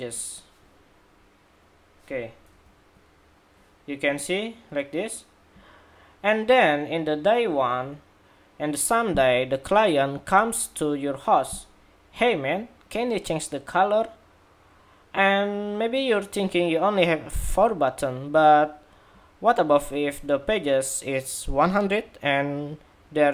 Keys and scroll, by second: 2.3 super+-, 2.5 super+-.